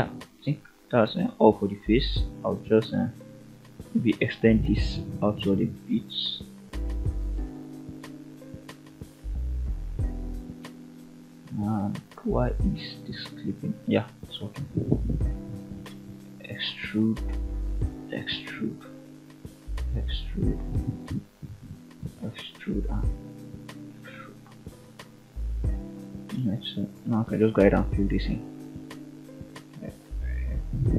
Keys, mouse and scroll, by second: 0.4 click, 0.7 click, 1.2-1.7 middle drag, 2.7 click, 3.3 e, 4.6 click, 5.4 ctrl+right click, 6.8 click, 7.2 g, 9.1 click, 10.3 click, 12.7 click, 14.0 ctrl+right click, 14.6 middle click, 15.7 ctrl+right click, 16.2 middle click, 17.7 ctrl+right click, 18.5 middle click, 20.0 ctrl+right click, 21.1 e, 21.9 click, 22.5 shift+click, 23.2 shift+click, 23.8 shift+click, 24.8 shift+click, 25.4 f, 25.7 click, 26.6 shift+click, 27.0 scroll down 2, 27.3-30.5 typing, 27.6 middle click, 28.4-28.8 middle drag, 29.2 middle click, 29.9-30.3 middle drag, 30.8 scroll down 2.